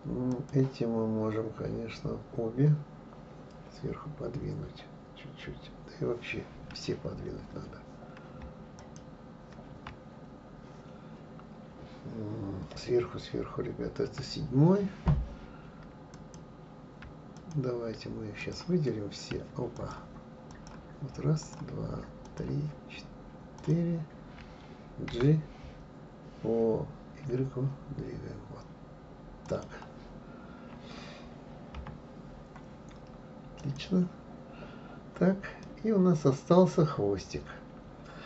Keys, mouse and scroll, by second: 0.3 click, 8.8 shift+click, 14.1 KP_7, 16.1 click, 17.4 shift+click, 18.4 shift+click, 19.7 click, 20.5 click, 21.4-22.4 shift+drag, 23.6 shift+click, 25.1 g, 31.8 KP_3, 33.6 click, 35.6-38.2 middle drag.